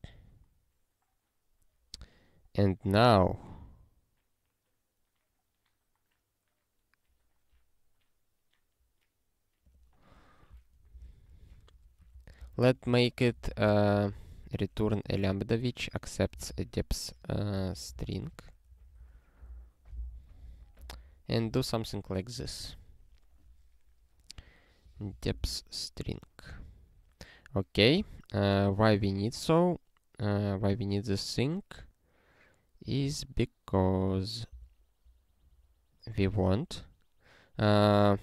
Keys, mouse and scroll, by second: 1.3 scroll up 3, 2.9 click, 9.6 click, 11.0 ctrl+alt+k, 11.7-14.4 typing, 12.1 ctrl+e, 12.4 Return, 16.1-18.5 typing, 19.0 ctrl+n, 20.1 ctrl+s, 20.8 ctrl+p, 24.9 ctrl+n, 25.1 ctrl+n, 25.5 ctrl+e, 28.2 scroll down 1, 30.2 scroll down 1, 32.8 click, 34.5 Return, 35.4 scroll up 1.